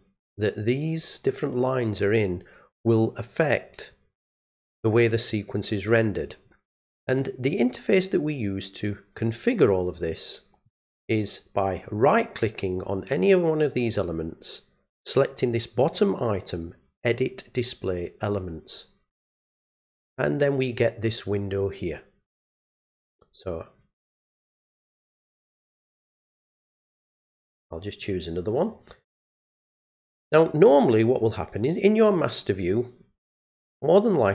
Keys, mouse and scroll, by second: 10.6 right click, 13.0 right click, 18.2 click, 20.7-24.8 drag, 26.8 click, 28.0 click, 32.1 click.